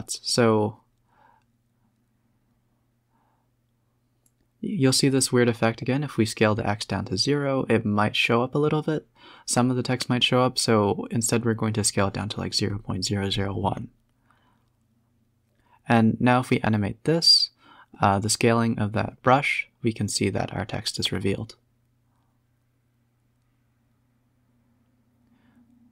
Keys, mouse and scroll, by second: 2.1 s, 7.5 scroll up 5, 9.5-10.1 scroll down 6, 10.8-11.8 drag, 11.8 space, 14.2 space, 14.3-16.5 drag, 17.1 click, 17.7 a, 17.8 a, 18.1 b, 19.4 shift+click, 20.6-23.0 drag, 23.5 click, 24.5 shift+click.